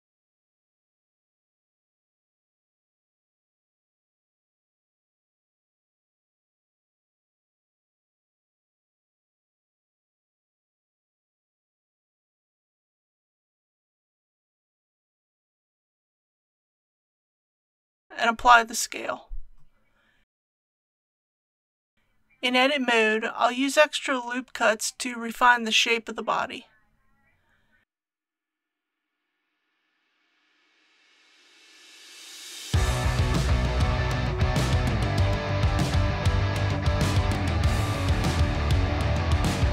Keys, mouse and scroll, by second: 4.5 click, 6.2-6.7 typing, 9.1 click, 10.7-11.2 typing, 16.0 click, 19.6 ctrl+a, 21.0 click, 25.2 Tab, 26.1 scroll up 1, 28.1 click, 31.4 ctrl+r, 32.0 click, 36.1 ctrl+r, 37.4 click, 39.6 3.